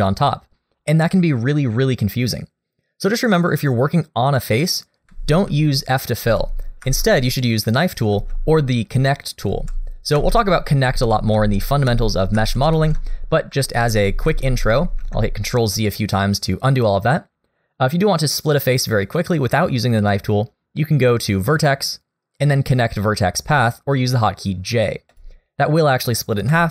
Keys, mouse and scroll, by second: 5.5 ctrl+z, 6.2 ctrl+z, 6.9 ctrl+z, 8.1 ctrl+z, 9.5 ctrl+z, 10.2 ctrl+z, 10.9 ctrl+z, 11.4 ctrl+z, 11.9 ctrl+z, 12.4 ctrl+z, 12.7 ctrl+z, 13.9 ctrl+z, 14.3 ctrl+z, 14.8 ctrl+z, 19.2 middle click, 21.5 click, 26.5 3.